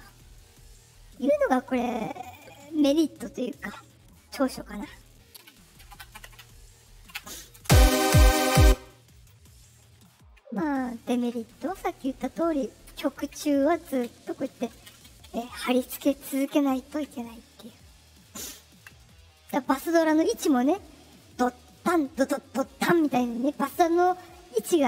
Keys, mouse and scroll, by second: 3.4 click, 7.5 space, 8.5 space, 9.1 click, 11.9-13.2 ctrl+drag, 19.1-19.4 scroll up 2.